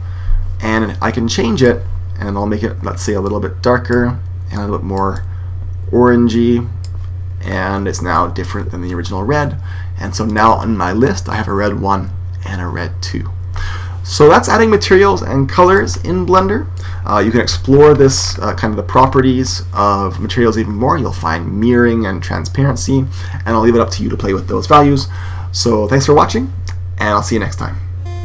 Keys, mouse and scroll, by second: 1.4 click, 8.0-9.9 middle drag, 10.1 click, 16.2-18.0 middle drag, 18.0-20.8 scroll up 1, 20.8 scroll down 1.